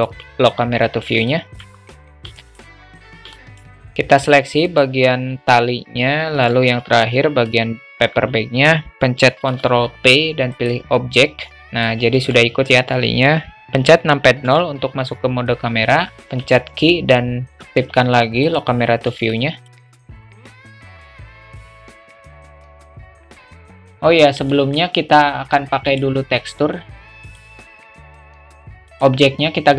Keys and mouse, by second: 1.3 alt+middle drag, 2.4 alt+middle click, 3.4 alt+middle click, 4.7 shift+click, 6.4 shift+click, 7.2 alt+shift+middle drag, 9.5 ctrl+p, 11.5 click, 12.1 ctrl+z, 13.6 KP_0, 14.5 KP_0, 16.3 q, 19.3 shift+middle click, 19.8 alt+shift+middle click, 20.0 q, 20.3 click, 20.5 click, 20.8 click, 21.1 click, 21.3 click, 21.6 g, 23.0 click, 23.4 ctrl+z, 23.5 ctrl+z, 23.8 q, 23.9 alt+middle click, 24.6 alt+middle drag, 25.9 click.